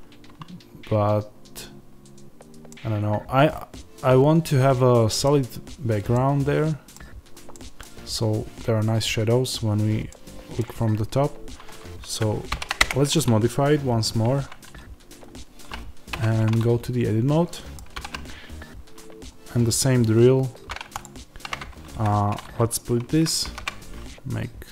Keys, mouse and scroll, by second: 6.9 scroll down 2, 10.0 middle click, 10.9-12.4 middle drag, 10.9-12.4 scroll up 2, 12.4 shift+d, 12.8 Return, 16.0 Tab, 17.4 middle click, 17.9 ctrl+r, 21.9 Escape, 23.3 ctrl+b.